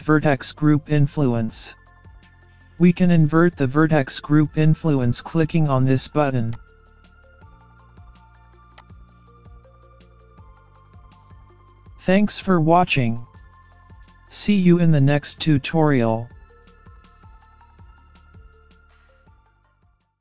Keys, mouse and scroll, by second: 6.6 click, 8.8 click.